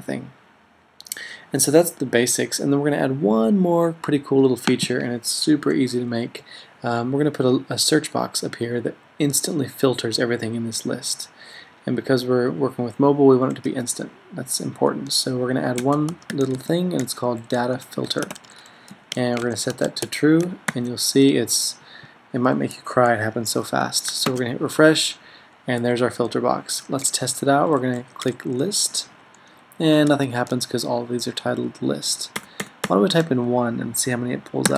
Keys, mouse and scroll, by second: 15.9-20.6 typing, 20.8 super+s, 21.6-22.7 typing, 24.4 super+r, 28.4-29.7 typing, 30.2 super+a, 32.5 BackSpace, 32.7 BackSpace, 32.9 BackSpace.